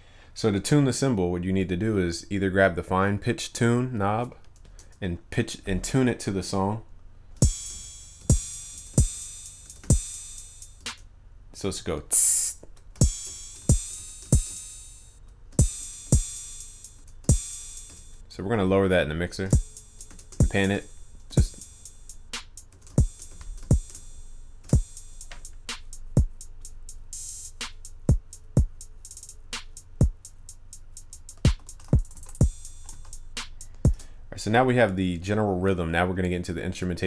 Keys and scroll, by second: 32.1 ctrl+s.